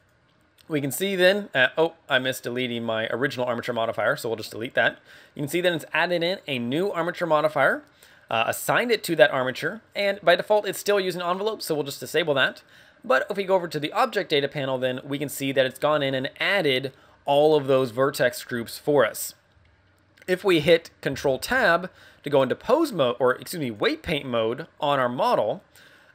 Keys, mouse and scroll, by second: 3.5 click, 11.8 click, 19.4 scroll down 10, 21.3 ctrl+Tab, 24.6 e, 25.5 click.